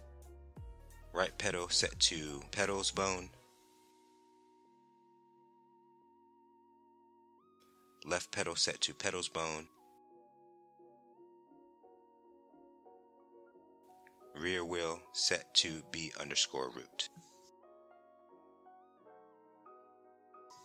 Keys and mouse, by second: 1.1-3.3 drag, 5.0 middle click, 6.1 click, 8.0-9.7 drag, 11.1 middle click, 12.8 click, 14.5-15.6 drag, 18.2 Tab, 19.4 KP_1.